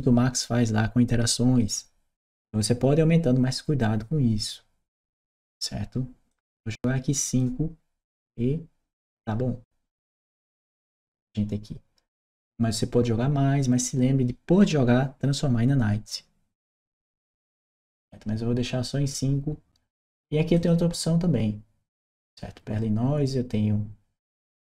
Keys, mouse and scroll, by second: 6.1-7.2 drag, 20.3 click.